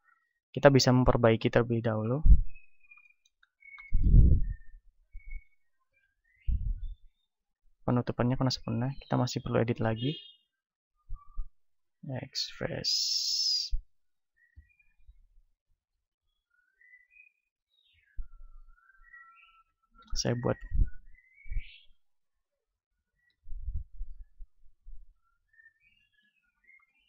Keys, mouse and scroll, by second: 2.1-4.1 right drag, 3.1-5.7 middle drag, 4.5 ctrl+Tab, 5.7 z, 6.5 ctrl+Tab, 8.0-10.7 right drag, 9.9 ctrl+Tab, 11.0-12.9 right drag, 11.9 x, 13.6-16.9 right drag, 14.5 x, 15.8 ctrl+Tab, 17.5-27.0 right drag, 19.9 f, 23.2 f, 26.1 f.